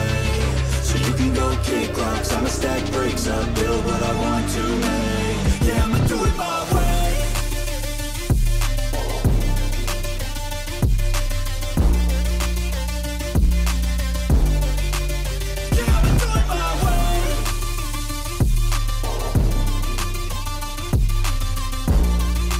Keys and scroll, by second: 4.0 ctrl+z, 21.0 ctrl+=, 21.1 space.